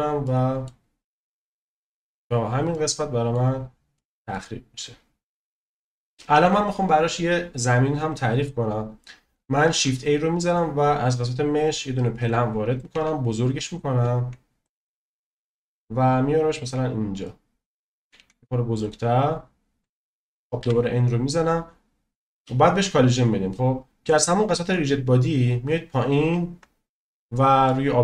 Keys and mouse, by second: 0.2-0.6 middle drag, 1.3 middle click, 2.7-3.3 middle drag, 3.9 middle click, 8.0 drag, 9.7 shift+a, 12.9 s, 17.2 middle click, 17.9 click, 18.2 s, 20.6 n, 24.6 click, 27.6-28.0 shift+middle drag.